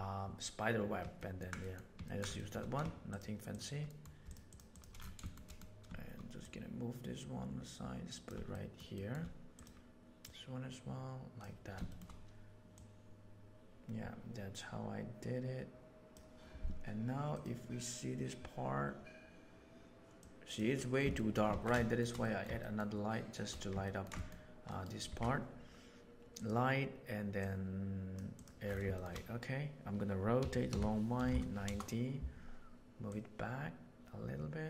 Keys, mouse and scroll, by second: 1.2 ctrl+middle click, 1.6 middle click, 2.0 ctrl+middle click, 2.4 shift+middle click, 3.8 shift+middle drag, 4.7 shift+click, 5.4 middle click, 5.5 drag, 6.4-8.2 right drag, 8.5 shift+middle drag, 8.9 shift+middle drag, 10.2-11.4 middle drag, 11.8 shift+middle click, 12.7 middle drag, 15.4 click, 20.2 click, 21.1 shift+middle drag, 21.5 alt+a, 21.7 shift+middle drag, 22.2 middle click, 22.6 middle click, 23.8 middle drag, 24.1 shift+middle click, 25.0 shift+a, 28.9 shift+middle click, 30.4 r, 33.1-34.6 middle drag.